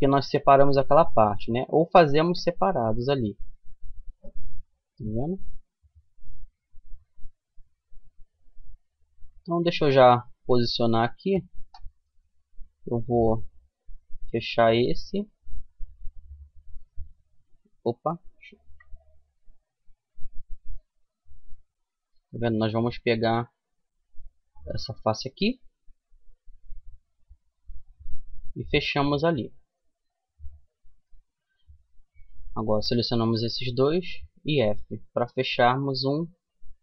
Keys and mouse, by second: 1.2 f, 2.9 Tab, 3.6 Tab, 6.0-14.4 middle drag, 15.4 middle click, 16.1-17.8 right drag, 18.0 ctrl+z, 18.9-21.8 middle drag, 24.2-25.6 right drag, 25.6 f, 25.9 middle click, 27.0-28.1 middle drag, 28.2-30.2 middle drag, 30.6-32.7 middle drag, 32.7 right click, 33.6 f, 34.6-36.3 middle drag.